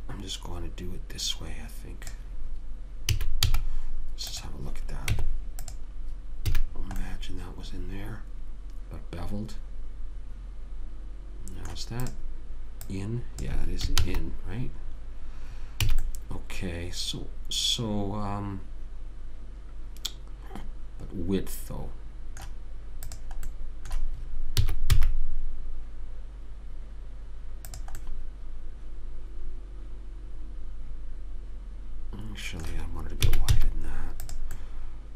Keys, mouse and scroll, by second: 0.0-1.3 drag, 3.4 a, 3.8 z, 5.4 Tab, 6.9 a, 12.4-14.8 drag, 14.4 ctrl+z, 16.2 a, 23.4 click, 24.9 s, 25.2 middle click, 28.3-30.1 middle drag, 33.6 s.